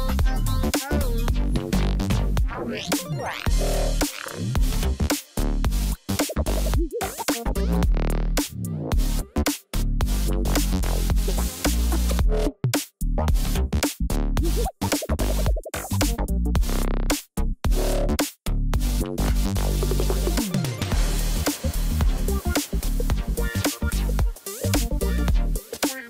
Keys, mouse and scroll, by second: 0.0 ctrl+z, 0.9 ctrl+z, 1.5 ctrl+z, 2.1 ctrl+z, 2.7 ctrl+z, 10.7 right click, 15.8 double click, 22.6 right click.